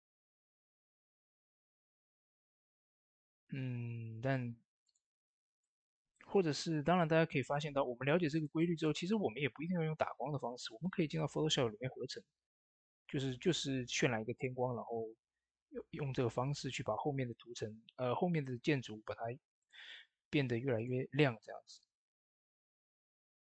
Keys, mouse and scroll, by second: 4.7 click, 4.7 typing, 5.4-8.3 middle drag, 8.8 middle click, 8.8 typing, 9.4 ctrl+s, 17.5 ctrl+s, 17.5 typing, 17.5 scroll down 1, 18.3 middle click, 19.4 click.